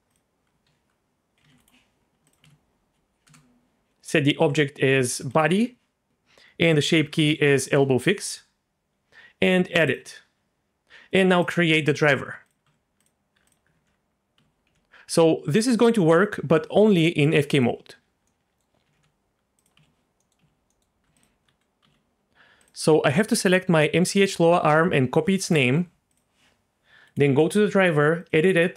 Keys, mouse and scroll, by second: 0.1 click, 0.6 F2, 2.3-3.7 ctrl+drag, 4.4 z, 5.0 click, 6.1-7.7 drag, 7.3 Down, 9.9 click, 11.4 click, 12.4 click, 12.6 Tab, 13.0 click, 13.4 click, 13.7 alt+r, 14.4 z, 14.6 r, 17.5 click, 18.3-18.6 middle drag, 18.9 r, 19.0 r, 19.7 z, 20.2 middle click, 20.4 z, 20.7 middle click, 21.2 alt+click, 21.8 z, 22.6 click, 24.4 F2, 25.7 Tab, 26.1 click, 27.0-28.7 drag.